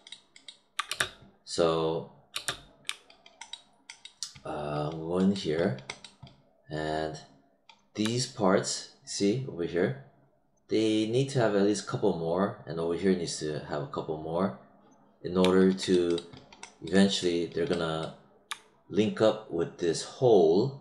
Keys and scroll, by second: 0.8 space, 2.3 space.